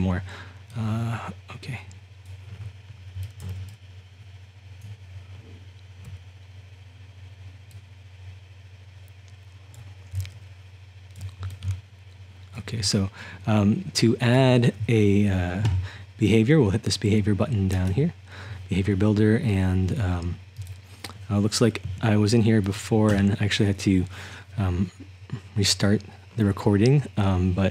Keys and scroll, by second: 2.9-4.8 typing, 6.1-15.6 typing, 21.9 BackSpace.